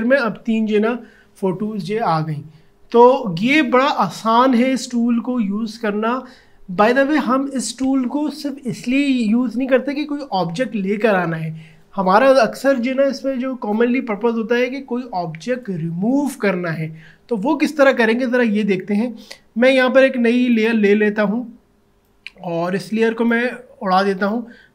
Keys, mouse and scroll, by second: 20.5-24.7 drag.